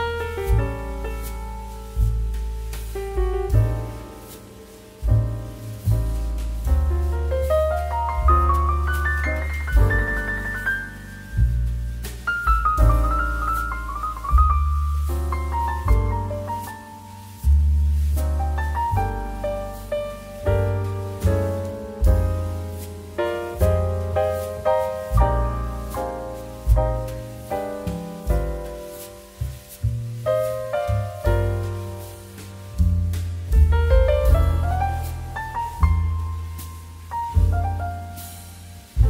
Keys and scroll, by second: 4.6 shift+2, 9.1 space, 13.1 space, 19.7 ctrl+k, 26.9 space, 32.7 space, 35.3 space, 35.8 2, 36.4 shift+2, 37.8 2.